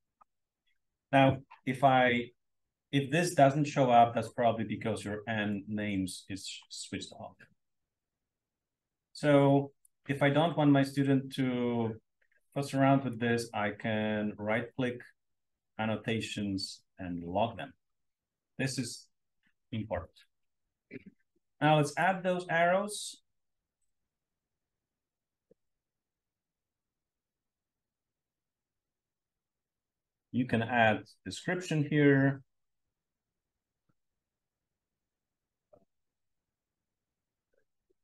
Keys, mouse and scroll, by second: 0.0-1.0 drag, 4.0 click, 4.8 click, 5.3 click, 5.7 click, 9.8-13.1 drag, 18.0 click, 21.9 click, 22.9-23.9 drag, 24.9 Return, 25.6-28.1 typing, 28.2 Return, 29.7 click, 30.1-31.4 drag, 32.7-37.7 typing.